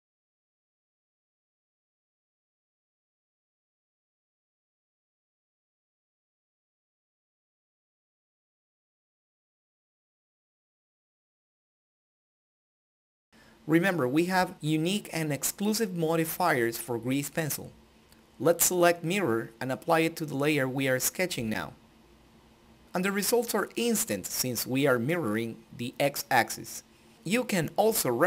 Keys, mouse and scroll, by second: 0.9 click, 1.3 ctrl+z, 1.5 click, 3.5 click, 5.1-7.3 drag, 8.6 click, 9.6 click, 10.5 ctrl+z, 10.6 click, 11.3 ctrl+z, 12.3 ctrl+middle click, 13.0 shift+middle click, 14.7 click, 19.0 click.